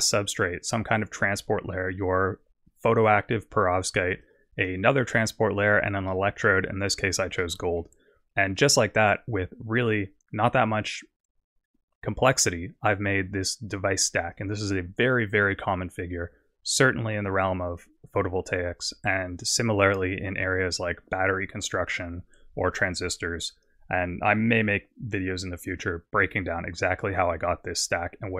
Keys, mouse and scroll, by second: 0.4 click, 1.7 click, 4.3 click, 5.5 click, 6.2 middle click, 6.9 scroll down 2, 7.4 middle click, 8.8 click.